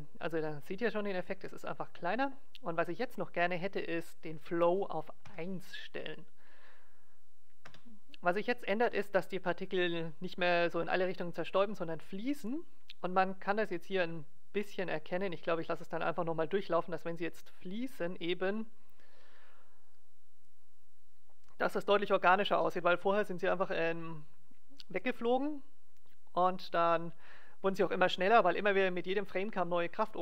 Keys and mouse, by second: 1.4 alt+a, 4.2-5.9 drag, 8.7 alt+a.